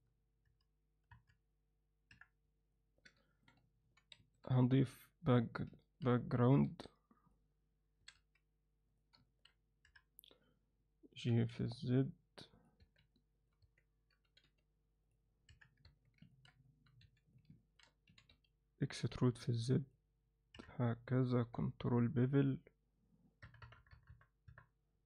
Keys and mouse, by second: 0.5 KP_3, 1.1 KP_2, 2.1 KP_1, 2.7 ctrl+alt+middle drag, 3.3 alt+shift+middle click, 3.8 shift+c, 4.2 shift+a, 5.8 ctrl+alt+middle click, 6.7 s, 8.0 s, 9.2 ctrl+alt+middle click, 9.8 KP_3, 11.2 g, 12.8 Tab, 13.1 alt+middle click, 13.6 Tab, 14.2 g, 15.5 KP_3, 15.8 Tab, 16.3 ctrl+alt+middle click, 16.6 alt+middle click, 17.0 2, 17.2 click, 17.6 ctrl+alt+middle click, 18.1 e, 19.3 alt+middle click, 19.9 click, 20.5 KP_3, 21.4 ctrl+b.